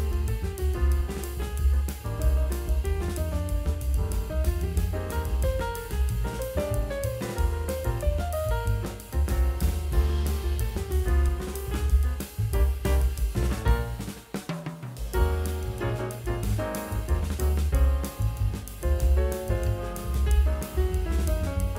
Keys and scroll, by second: 2.0 [, 2.3 ], 6.6 v, 7.0 ctrl+alt+z, 7.1 e, 10.0-11.5 typing, 12.6 l, 13.4 ctrl+alt+d, 13.7 ctrl+j, 14.0 ctrl+t, 15.3 Return, 15.4-17.1 typing, 16.0 ctrl+e, 17.7 ctrl+j, 18.5-19.9 typing.